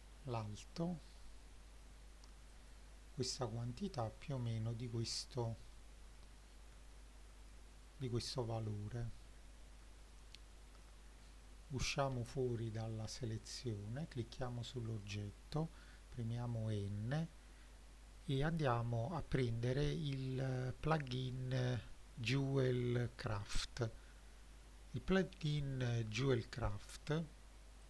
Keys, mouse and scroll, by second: 2.6 click, 3.9 click, 4.5-5.5 scroll down 5, 5.5 middle click, 6.2 middle click, 6.8 shift+middle click, 8.1-9.8 shift+middle drag, 10.1 middle click, 12.2 Tab, 12.9 click, 13.7 click, 15.8 n, 18.5 click.